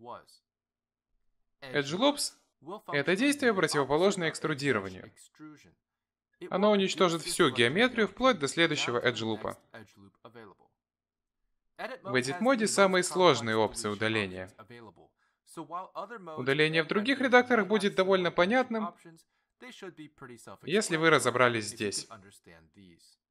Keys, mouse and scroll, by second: 0.0 middle click, 2.6 ctrl+z, 3.2 middle click, 4.3 ctrl+r, 4.9 middle click, 6.3 click, 7.0 shift+click, 7.7 shift+click, 9.1 x, 14.7 ctrl+z, 15.6 ctrl+z, 16.8 ctrl+z, 17.1 ctrl+z, 17.5 ctrl+z, 18.5-21.0 scroll down 6.